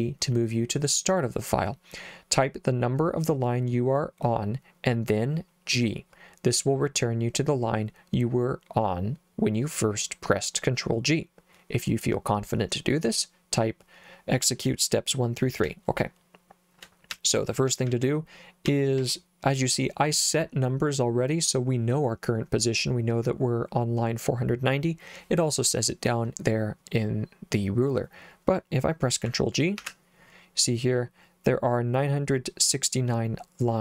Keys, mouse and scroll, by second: 15.6 k, 17.1-19.0 typing, 29.8 ctrl+g.